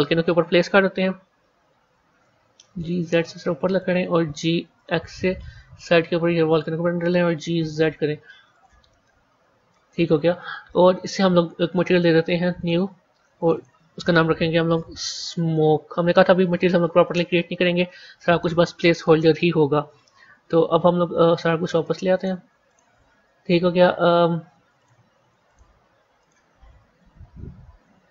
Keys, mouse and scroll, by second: 0.4-0.8 scroll down 6, 0.8 KP_1, 2.1 g, 4.1 g, 7.2 g, 8.8-11.6 middle drag, 11.6 click, 12.5 click, 13.4-16.6 drag, 19.5 KP_1, 19.9 KP_3, 22.1 click, 22.6 click, 23.6-24.7 scroll up 1, 24.7 click, 26.1 click, 26.4-28.1 scroll up 3.